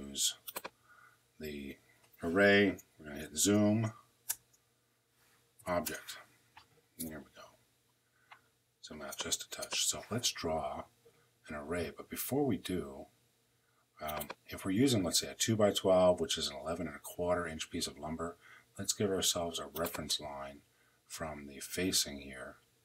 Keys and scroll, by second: 3.0 z, 4.1 Return, 5.4 o, 5.6 Return.